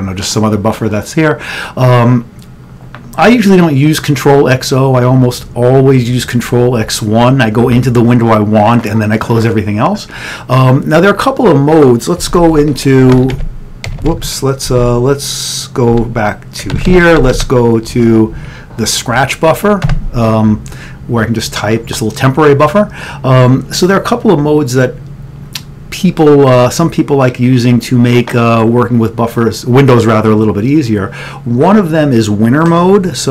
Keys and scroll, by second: 12.4 ctrl+x, 12.6-13.9 typing, 14.8 ctrl+x, 16.8 ctrl+x, 16.8 o, 19.9 o, 20.1 Return.